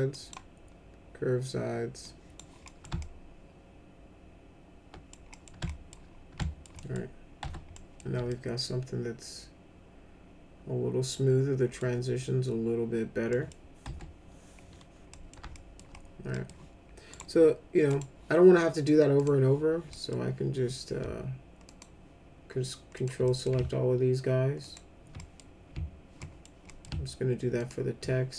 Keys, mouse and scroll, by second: 0.1 click, 2.0 click, 2.6 middle click, 2.9-5.1 alt+middle drag, 5.3 middle click, 5.6 alt+middle click, 6.4 alt+middle click, 6.7 middle click, 7.4 F4, 7.7 middle click, 8.2-11.8 alt+middle drag, 13.3 middle click, 13.8 F4, 15.1 middle click, 15.5 alt+middle click, 16.3 middle click, 17.1 right click, 17.9 click, 19.1 click, 19.9 middle click, 21.7 ctrl+click, 22.9 ctrl+click, 23.2 middle click, 24.6 ctrl+click, 25.1 middle click, 26.2 middle click, 26.6 middle click, 27.6 ctrl+click.